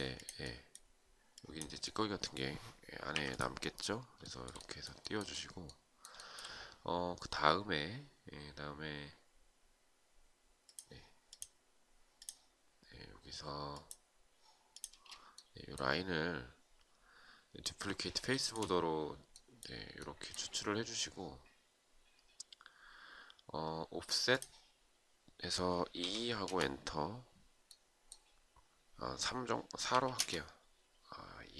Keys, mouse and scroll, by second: 2.7 Delete, 3.8 shift+right click, 4.6 shift+right click, 5.7 shift+right click, 14.4 space, 17.8 shift+right click, 25.7 Return, 29.5 space, 31.3 2.